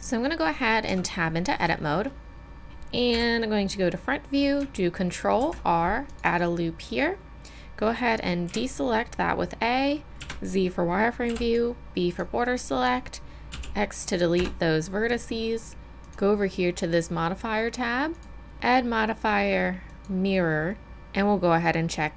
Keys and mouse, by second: 0.9 Tab, 1.8 middle click, 2.6 click, 3.2 KP_1, 5.4 ctrl+r, 8.5 a, 10.2 z, 11.3 b, 13.5 x, 16.1-20.1 drag.